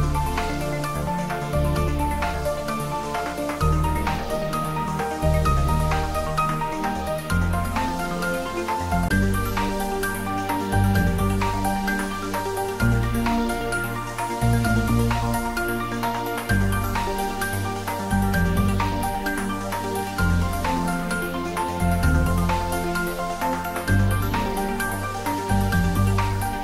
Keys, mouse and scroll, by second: 2.2 click, 3.8 Tab, 4.8-7.6 drag, 8.8 x, 10.0 click, 10.9-11.5 middle click, 11.6 shift+z, 12.1-12.7 middle click, 12.7 Tab, 13.2 right click, 13.8 click, 14.2-17.7 middle drag, 19.1 click, 19.8 scroll up 1, 20.4-21.3 middle click, 21.6 z, 21.8 middle click, 23.1 2, 23.5 click, 24.7 Tab, 25.6 click.